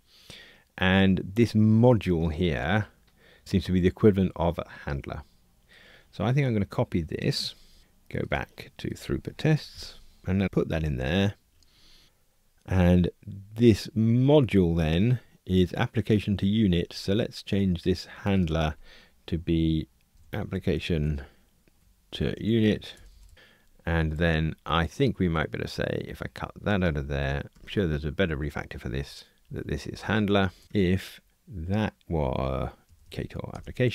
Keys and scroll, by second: 7.7 super+c, 9.8 shift+super+F12, 10.6 super+v, 23.3 Escape, 27.5 super+x, 30.6 F2, 31.3 alt+Return.